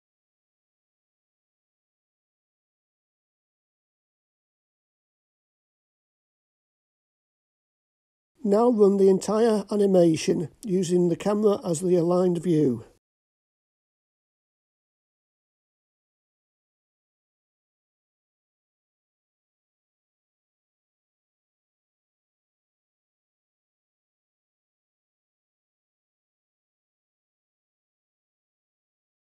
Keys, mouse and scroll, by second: 2.7-7.3 drag, 8.3 click, 10.1 click, 13.5 click, 15.3 click.